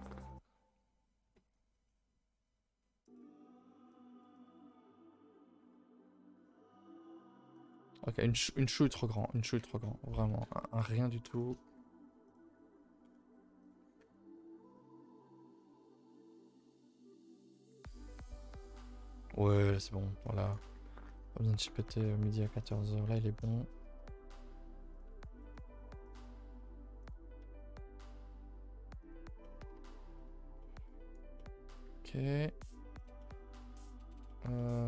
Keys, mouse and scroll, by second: 20.0 scroll down 4, 20.2-20.7 middle drag, 20.7 ctrl+s, 20.8-21.1 scroll up 3, 21.1 a, 21.2 a, 21.3 middle drag, 21.5 scroll up 1, 21.8 shift+middle click, 22.6 click, 22.9 scroll up 2, 23.1 Tab, 23.2 shift+middle click, 23.7 scroll up 2, 23.8-25.2 typing, 25.4 middle click, 26.0-29.4 drag, 29.4 middle click, 29.6 a, 29.7 a, 29.9 middle click, 30.1 1, 30.2 middle click, 31.1 scroll down 1, 31.4-31.9 middle drag, 32.3-32.9 middle drag, 32.9 click, 33.2 middle click, 33.5 middle click, 34.3 middle click.